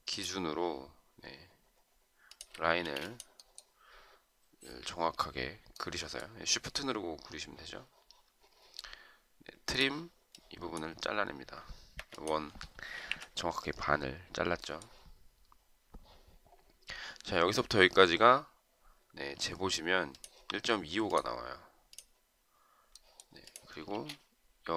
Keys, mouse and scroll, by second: 2.3 shift+click, 2.9 space, 12.0 Escape, 13.1 Delete, 23.9 space.